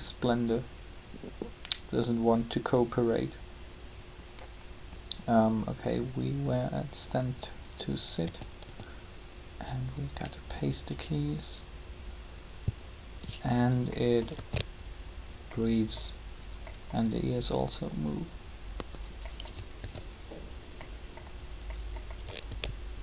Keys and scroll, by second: 8.2-8.6 typing, 14.2 alt+a, 19.8 alt+a, 22.4 alt+a.